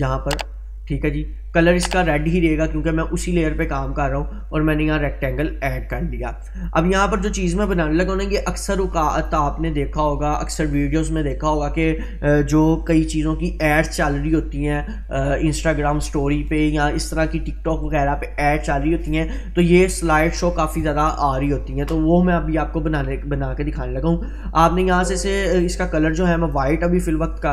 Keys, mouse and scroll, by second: 24.7-27.1 drag.